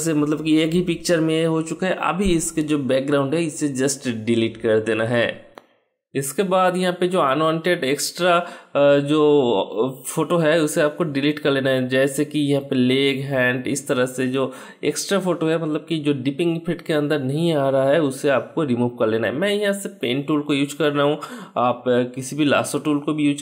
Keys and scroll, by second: 2.6 Delete, 4.8 ctrl+d, 20.7 ctrl+Return, 21.6 Delete, 23.0 ctrl+d.